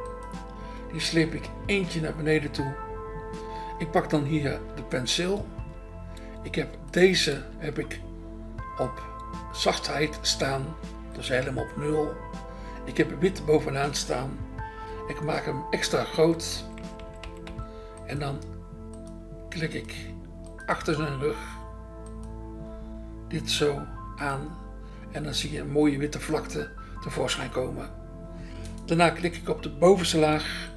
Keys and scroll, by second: 0.6 BackSpace, 4.6 BackSpace, 5.6 BackSpace, 7.4 BackSpace, 13.4 BackSpace, 14.9 ], 16.5-17.4 typing, 30.4 BackSpace.